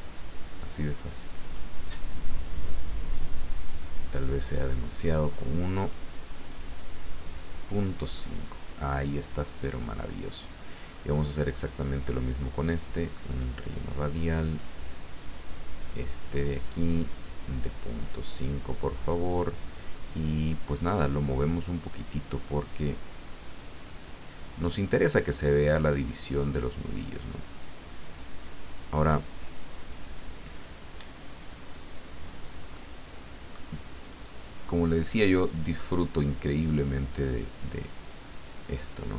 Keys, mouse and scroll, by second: 4.0 click, 4.8 click, 5.3 click, 5.8 click, 6.5 click, 9.7 click, 10.4 click, 11.8 click, 13.3 click, 14.5 click, 15.8 click, 17.0 click, 18.0 click, 18.4 click, 19.0 click, 20.7 click, 22.8-24.1 drag, 25.0-27.6 drag, 28.7-32.4 drag, 32.7-34.2 middle drag, 37.3-38.7 drag.